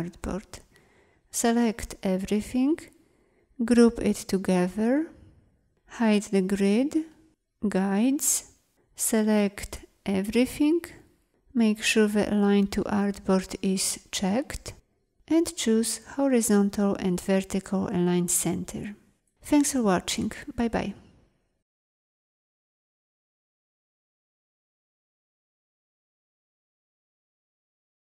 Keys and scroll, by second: 3.3 ctrl+g, 6.2 ctrl+', 7.6 ctrl+;, 9.3 ctrl+a.